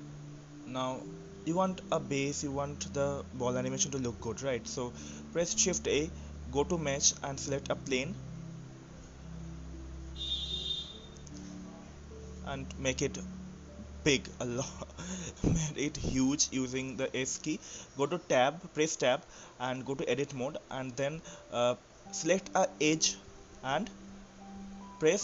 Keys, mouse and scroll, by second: 4.5-5.3 scroll down 1, 5.3-6.3 middle drag, 6.3-6.8 scroll up 3, 6.8-10.6 shift+middle drag, 10.6 shift+a, 11.0 s, 14.2-14.7 scroll up 1, 14.7-15.9 middle drag, 15.9-16.4 scroll down 3, 16.4-17.4 middle drag, 17.4 s, 18.9-19.4 scroll down 4, 19.4-20.5 shift+middle drag, 20.5-20.8 scroll down 3, 20.8-22.3 shift+middle drag, 22.3 Tab, 24.6 click.